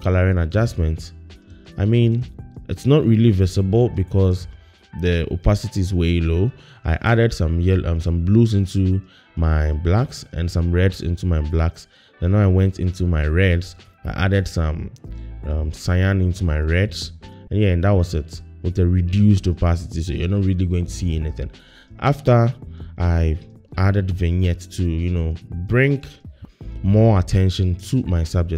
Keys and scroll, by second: 3.5 ▢.